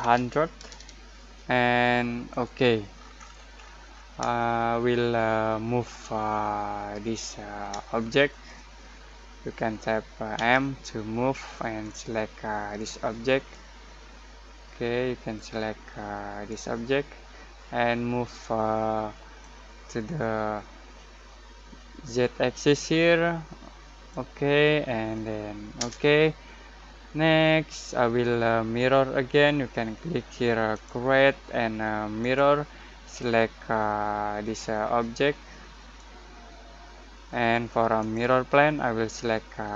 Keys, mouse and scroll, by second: 0.0-0.7 typing, 2.3 click, 3.1-4.2 scroll up 1, 4.3-7.8 shift+middle drag, 7.8-10.3 shift+middle drag, 10.3 m, 11.8-19.4 drag, 19.4-25.7 drag, 25.7 Return, 27.0-27.4 scroll down 1, 27.4-29.2 scroll up 1, 30.7-37.9 drag.